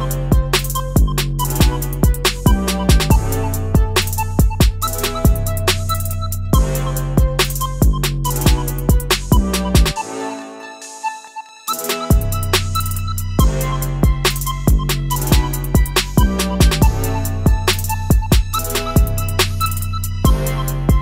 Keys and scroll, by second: 2.4 i, 2.9 ctrl+z, 15.3 g.